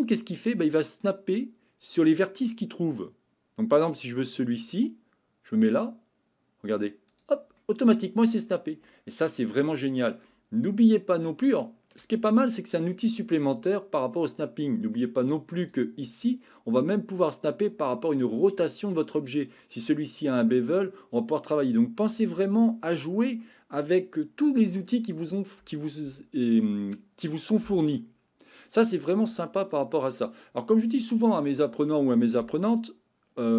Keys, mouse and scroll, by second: 3.9 click, 7.1 click, 7.6-8.9 middle drag, 9.5-10.1 shift+middle drag, 10.6-11.1 middle drag, 11.5-12.0 shift+middle drag, 16.0-19.6 drag.